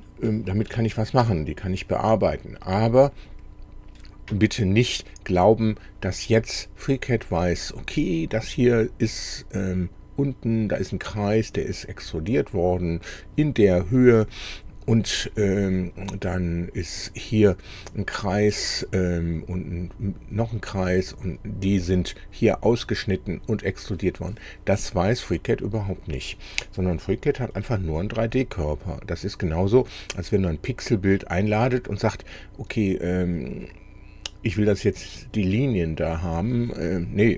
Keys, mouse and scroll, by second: 0.1 middle click, 0.8 shift+click, 1.7 middle click, 2.6 click, 27.4-28.8 drag, 29.1 click.